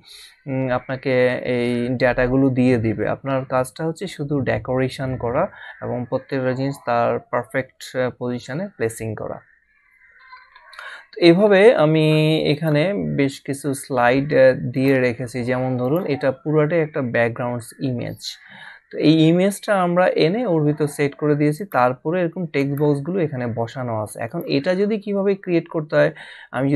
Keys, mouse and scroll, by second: 12.5 click, 14.7 click, 21.5 click, 24.3 click.